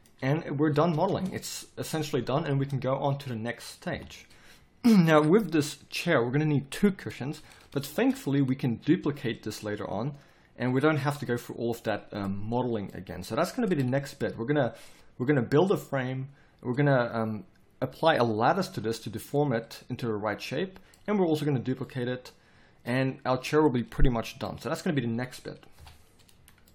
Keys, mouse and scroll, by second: 0.2 z, 1.1 Tab, 2.5 Tab, 3.9 KP_3, 25.8 KP_3.